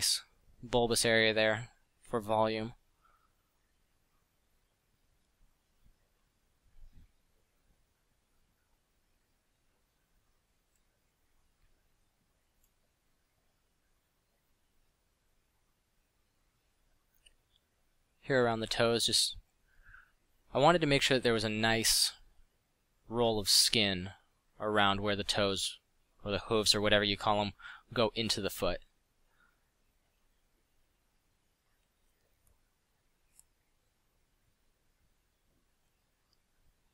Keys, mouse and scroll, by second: 3.7 f, 8.0 f, 10.0 f, 21.5 f, 24.4 f, 26.5 f, 28.2 f.